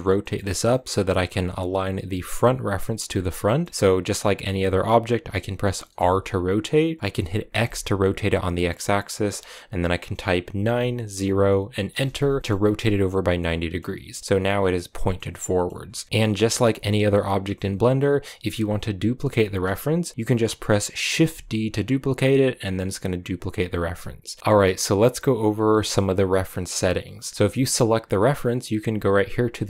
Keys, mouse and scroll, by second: 0.1-3.1 middle drag, 3.1 scroll down 2, 3.3 middle click, 3.7-4.3 scroll up 1, 4.3 middle click, 4.7-5.8 scroll up 1, 5.8 r, 12.3 scroll down 1, 12.4 middle click, 13.1 scroll down 1, 13.3-16.0 middle drag, 16.0 g, 17.0 g, 20.4 right click, 21.1 shift+d, 24.4 shift+middle click, 24.5-27.3 drag, 27.3 g.